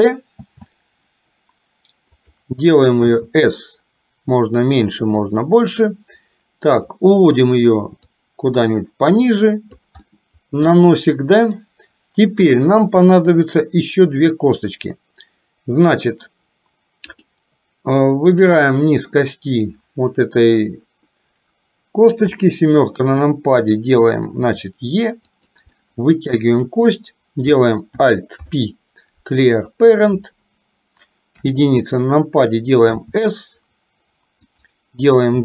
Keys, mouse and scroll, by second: 0.5 shift+d, 3.1 s, 8.2-9.9 drag, 10.0-11.7 middle drag, 18.4 click, 22.2 KP_7, 24.5 e, 25.7 middle click, 27.0 click, 28.4 alt+p, 31.5 KP_1, 33.0 s.